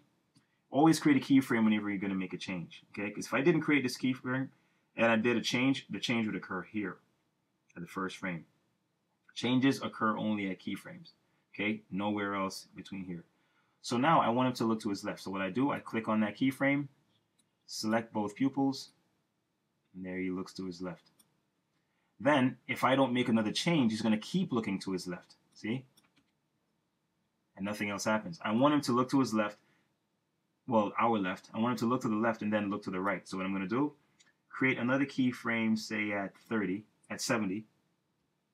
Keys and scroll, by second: 0.4 F6, 26.2 Return, 38.2 F6.